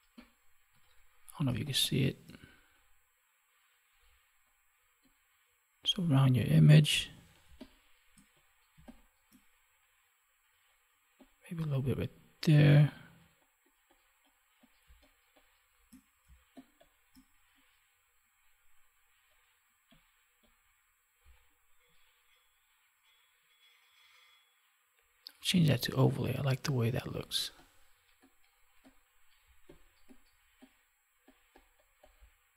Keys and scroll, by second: 0.6 ctrl+=, 1.4 space, 7.4 space, 14.8 space.